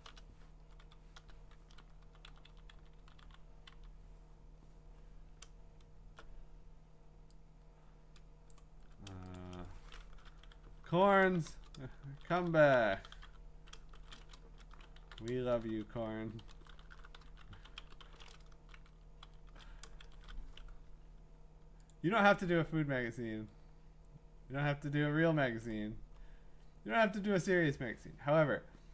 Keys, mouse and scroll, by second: 0.0 BackSpace, 1.1 Up, 2.0 Down, 2.3 Down, 2.5 Down, 2.7 Down, 3.0 Down, 3.3 Down, 3.7 Down, 5.7 scroll down 4, 8.5 click, 9.4 shift+click, 10.0-18.3 typing, 12.5 shift+click, 18.7 Up, 18.9 Up, 19.2 Up, 20.0 ctrl+shift+Left, 21.9 click, 23.1-24.9 drag, 26.1 middle click, 26.1 scroll down 1, 26.2-27.0 scroll down 1, 27.0 scroll, 27.4-28.9 middle drag.